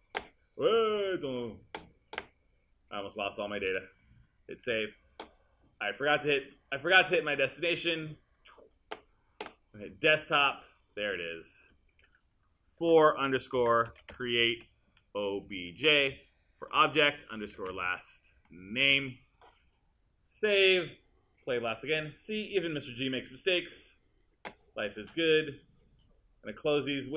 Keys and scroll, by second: 4.7 super+s, 12.5-19.5 typing.